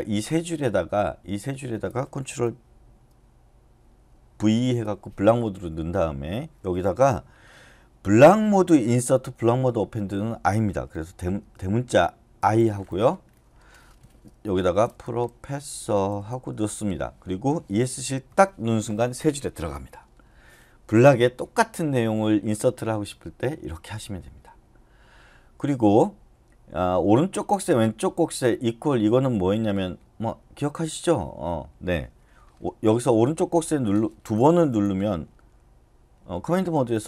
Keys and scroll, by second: 4.5 ctrl+v, 12.4 i, 14.4-17.0 typing, 18.3 Escape.